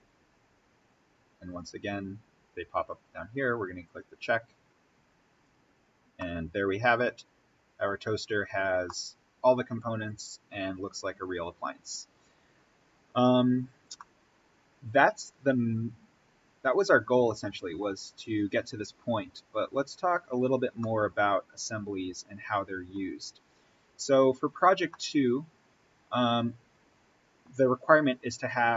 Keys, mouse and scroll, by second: 3.7 click, 5.7-6.1 scroll up 1, 6.1-8.0 middle drag, 8.0-8.8 scroll down 1, 8.8-13.9 middle drag, 13.9-20.3 middle drag, 20.8-23.1 middle drag, 23.1-23.4 scroll up 1, 24.8 middle click, 25.1-26.5 scroll down 1.